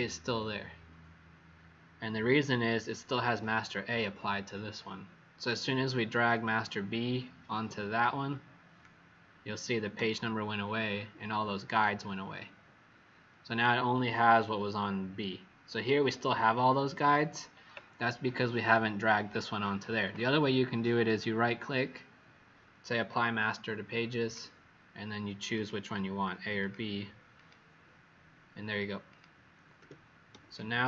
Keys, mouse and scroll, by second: 6.4 click, 14.3-15.0 alt+scroll down 2, 16.3 alt+scroll up 1, 20.0 click, 21.0 right click, 23.0 click, 29.7 w, 30.5 click.